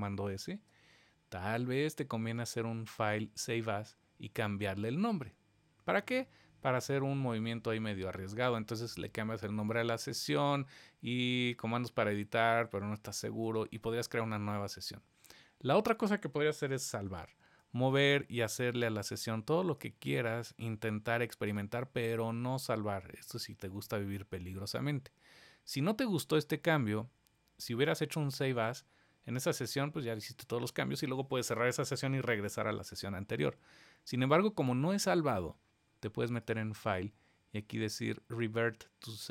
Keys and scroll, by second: 17.0 super+s.